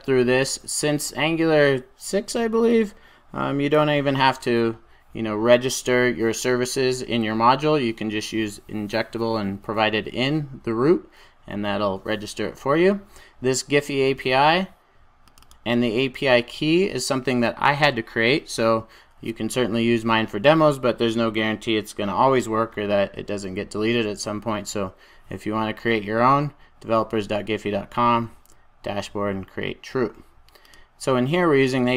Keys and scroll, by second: 0.3 super+s.